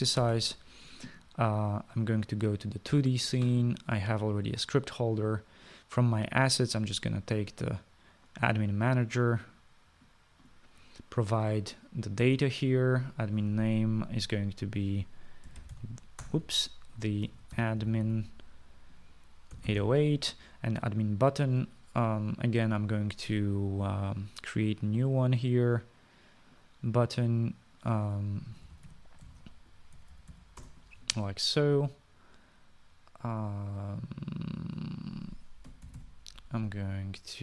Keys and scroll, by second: 1.5 ctrl+s, 16.5-19.3 typing, 20.8 typing, 29.5-32.1 typing, 36.7-37.4 typing.